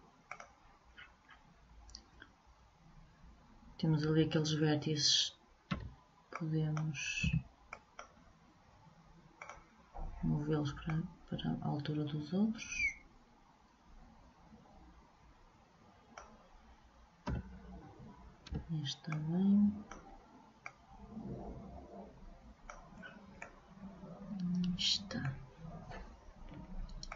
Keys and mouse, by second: 0.5 click, 1.1-4.0 middle drag, 6.0 b, 7.4 b, 9.5-12.8 drag, 17.4 a, 18.6 b, 20.8-22.5 drag, 23.1-27.0 middle drag.